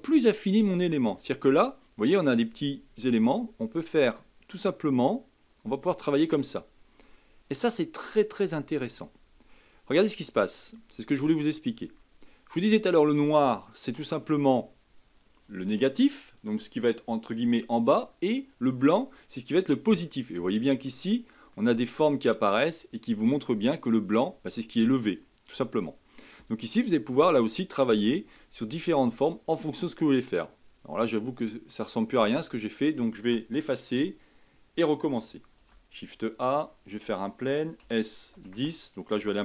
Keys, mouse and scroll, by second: 0.2 scroll down 3, 1.4-2.3 scroll down 3, 2.3-5.3 drag, 5.5-11.3 drag, 13.7-16.8 middle drag, 20.8-25.0 middle drag, 25.0-26.4 scroll up 1, 27.6-29.7 drag, 29.7-30.1 scroll down 3, 30.1-31.8 middle drag, 31.8-33.8 scroll up 1, 33.8 x, 35.5 shift+a.